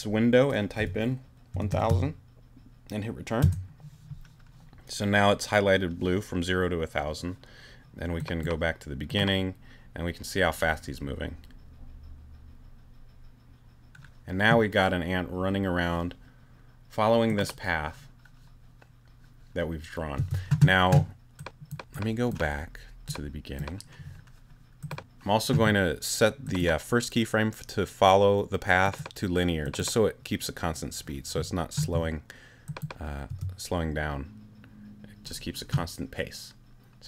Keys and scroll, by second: 0.8 l, 1.5 0, 3.4 Return, 20.2 space, 33.3 space.